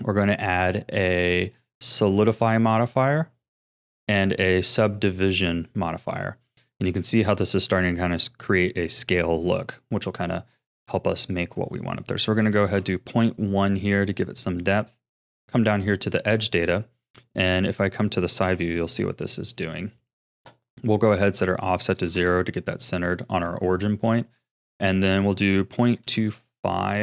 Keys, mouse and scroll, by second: 4.0-6.2 drag, 6.2-6.9 scroll up 3, 6.9-9.9 shift+middle drag, 11.5-14.0 drag, 14.0-15.8 right drag, 15.8-17.4 drag, 17.4-18.4 middle drag, 18.4 KP_3, 19.1-19.5 scroll up 5, 19.5-21.3 shift+middle drag, 21.3-24.3 drag, 25.0-27.0 drag.